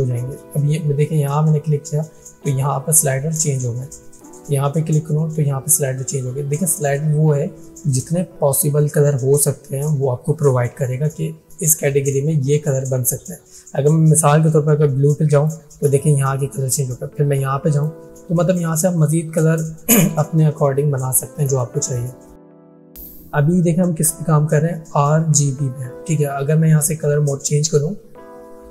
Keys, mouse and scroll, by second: 4.4 click, 14.5-15.5 drag.